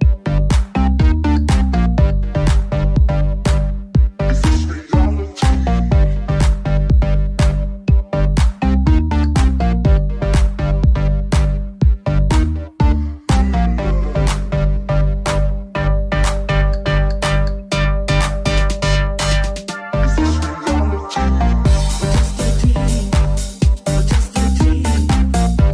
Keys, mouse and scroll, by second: 0.4-3.2 ctrl+middle drag, 0.6 ctrl+KP_Add, 1.0 g, 3.2 KP_1, 4.1-8.9 shift+middle drag, 9.0-18.7 middle drag, 11.3 shift+c, 17.2 right click, 17.8 g, 18.7 right click, 18.7-21.3 middle drag, 20.5 shift+g, 21.4-24.9 shift+middle drag, 22.0 right click.